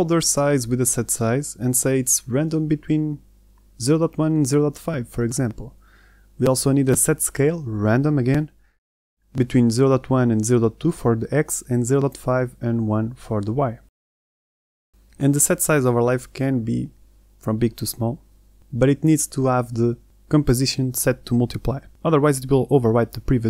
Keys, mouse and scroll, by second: 12.9 click, 13.3 click.